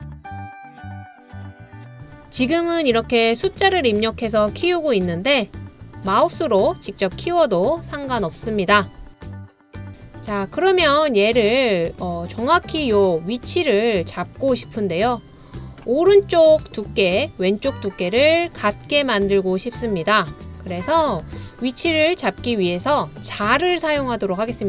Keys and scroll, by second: 1.6-3.9 typing, 5.4 typing.